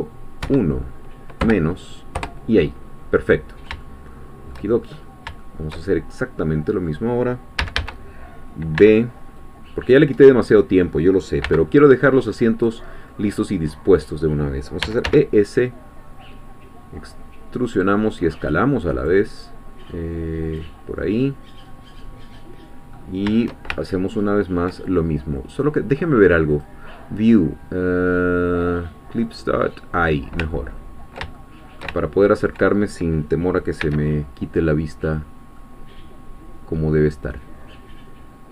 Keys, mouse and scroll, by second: 0.4 KP_1, 1.4 KP_Subtract, 2.2 Return, 3.9 shift+middle click, 4.9-5.2 shift+scroll up 1, 5.4-7.1 shift+middle drag, 7.6 a, 8.8 b, 9.4 click, 10.2 middle click, 11.4 b, 12.1 click, 13.2-14.8 middle drag, 14.8 e, 15.1 s, 19.4-19.7 scroll down 1, 20.4 click, 21.0-22.7 middle drag, 22.9-23.3 scroll up 1, 23.7-25.1 ctrl+shift+middle drag, 26.5 click, 29.3 click, 30.5-33.0 ctrl+middle drag, 33.8 c, 35.6-37.3 middle drag.